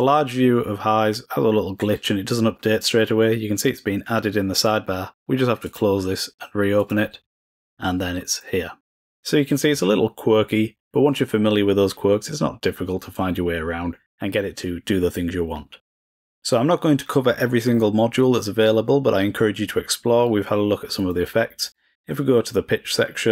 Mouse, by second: 5.6 click, 6.7-8.7 drag, 20.9-21.4 drag, 21.6-23.3 drag.